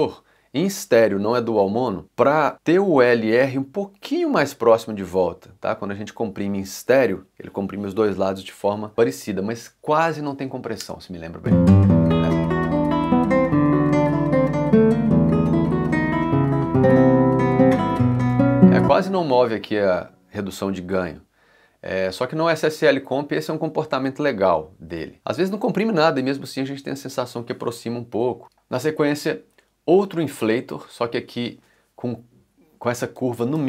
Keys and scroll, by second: 9.2 ., 10.8 space, 18.2 space.